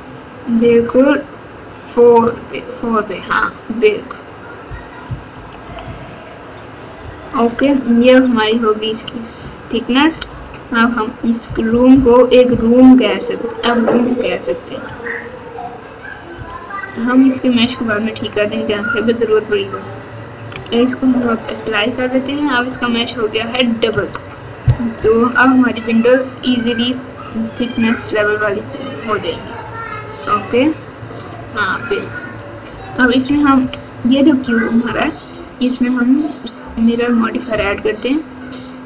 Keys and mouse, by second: 5.0 KP_2, 5.3 KP_2, 5.6 KP_2, 5.8 KP_2, 7.6 Tab, 8.2 Tab, 10.1 alt+z, 11.4 KP_4, 11.6 KP_4, 12.4 KP_4, 12.7 KP_4, 16.3 KP_6, 21.0 ctrl+a, 22.6 Tab, 23.9 Tab, 24.9 KP_7, 26.6 alt+z, 28.6 click, 29.9 click, 31.1 click, 33.2 KP_2, 33.4 KP_2, 33.6 KP_2, 34.8 KP_2, 37.0-38.8 drag.